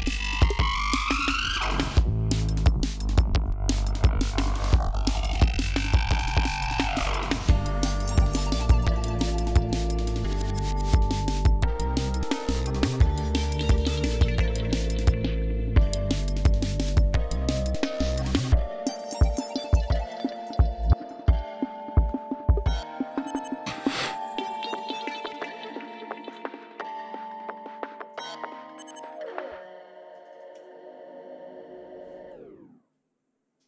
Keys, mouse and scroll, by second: 0.1 scroll up 2, 3.3 scroll up 2, 5.5 scroll down 2, 6.5 ctrl+scroll up 2, 8.0 ctrl+scroll down 2, 9.1 ctrl+scroll down 2, 9.7 ctrl+scroll up 2, 10.8 ctrl+scroll up 2, 11.8 ctrl+scroll down 2, 20.1 ctrl+scroll down 2, 20.9-21.5 ctrl+scroll up 3, 21.7-22.0 scroll down 2, 22.6 scroll down 2, 24.3-24.8 ctrl+scroll up 2, 25.2 ctrl+scroll down 2, 25.6-26.0 ctrl+scroll up 1, 26.0 ctrl+scroll down 1, 26.8-27.1 ctrl+scroll down 1, 27.8 ctrl+scroll down 1, 28.8-29.4 scroll up 2, 30.7 ctrl+scroll down 2, 31.0-31.3 ctrl+scroll up 2.